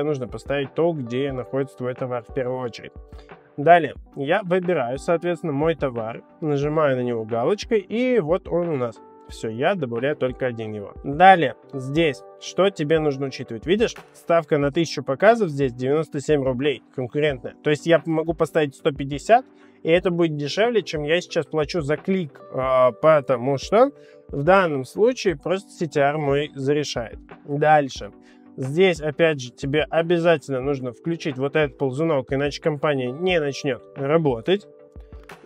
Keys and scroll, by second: 17.8 1, 18.1 5, 18.2 0.